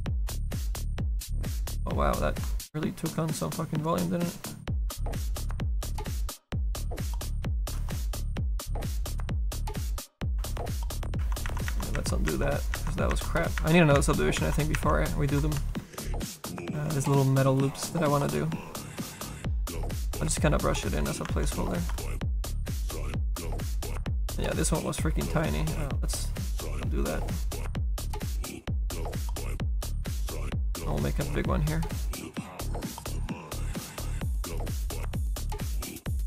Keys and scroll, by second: 6.8 ctrl+z, 10.9 ctrl+z, 11.5 ctrl+z, 12.3 ctrl+z, 12.8 ctrl+z, 13.1 ctrl+z, 13.6 ctrl+z, 14.0 ctrl+z, 14.4 ctrl+z, 14.8 ctrl+z, 15.6 s, 16.7 s, 34.6 ctrl+z.